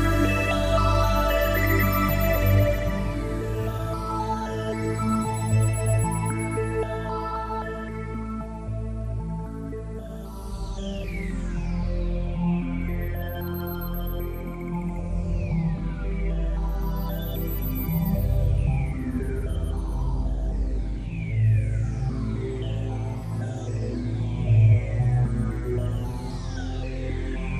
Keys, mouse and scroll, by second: 2.3-3.4 scroll down 7, 3.6 middle click, 7.1 click, 7.7-8.5 scroll up 4, 21.7 click, 23.2 click, 25.9-27.0 scroll down 1, 27.0 click, 27.0 scroll down 1.